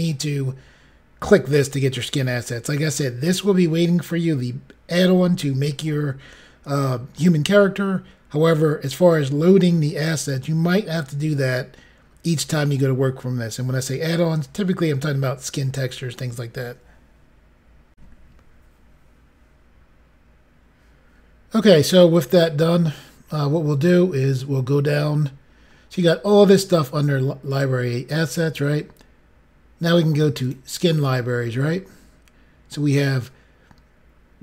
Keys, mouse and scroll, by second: 17.9 Pause, 18.9 Insert, 23.2-23.9 scroll down 5, 25.7-26.9 scroll up 3, 27.4 click, 30.4 click, 31.3-32.4 scroll down 5, 33.2 scroll down 1.